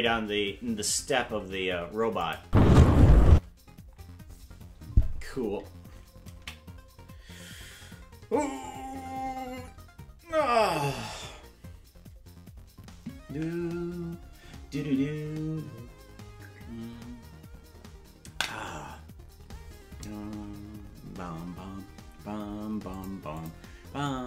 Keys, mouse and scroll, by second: 2.3-4.4 drag, 2.4 space, 8.5 ctrl+s.